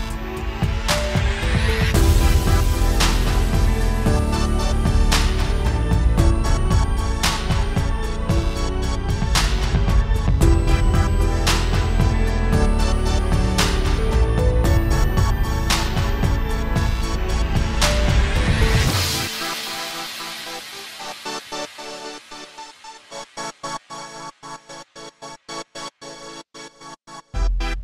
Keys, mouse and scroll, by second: 0.0 click, 0.6 r, 2.3 click, 4.1 alt+a, 4.1 click, 4.2-4.7 scroll down 3, 4.4 shift+middle click, 4.7 click, 5.8-6.2 scroll down 5, 5.9 middle click, 6.2 shift+middle click, 6.4-6.7 scroll up 5, 6.6 click, 6.7 x, 7.0 click, 7.3-7.9 scroll down 2, 7.4 shift+middle click, 7.6 click, 7.9 r, 9.6 alt+s, 9.6 middle click, 9.9 click, 10.3 scroll down 3, 10.4 shift+middle click, 10.5 middle click, 10.8 click, 11.1-11.9 scroll up 4, 11.2 middle click, 11.6 shift+middle click, 11.9 r, 13.7 click, 14.7 middle click, 14.9 scroll down 2, 15.1 click, 16.7 alt+a, 16.7 click, 16.8 click, 16.9 scroll down 1, 17.0 x, 17.2-17.8 scroll up 5, 17.3 middle click, 17.8 shift+middle click, 18.1 middle click, 18.6 shift+middle click, 18.7 middle click, 19.0 shift+middle click, 19.1 middle click, 19.4 click, 20.0 right click, 20.1-20.6 scroll down 4, 20.2 alt+a, 20.4 shift+middle click, 20.6 middle click, 21.1 click, 25.6-25.9 scroll up 3, 25.9 click, 26.3 middle click, 26.5-27.0 scroll up 2, 26.8 click, 27.1 scroll down 5, 27.2 middle click, 27.3 scroll up 1, 27.7 click.